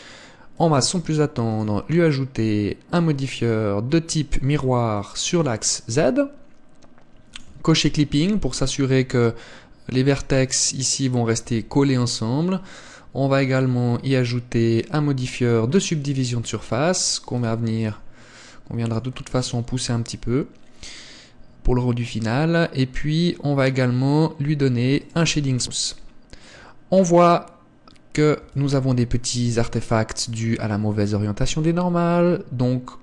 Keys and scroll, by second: 8.9 Tab, 11.4 Tab, 28.5 Tab.